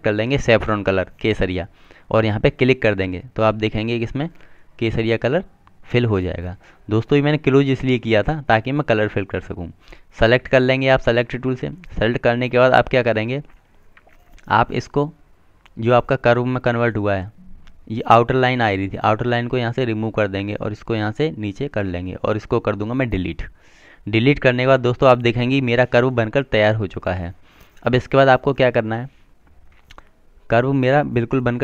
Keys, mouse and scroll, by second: 10.9 click, 18.6 right click, 20.9 click, 25.3 Delete, 26.8 click.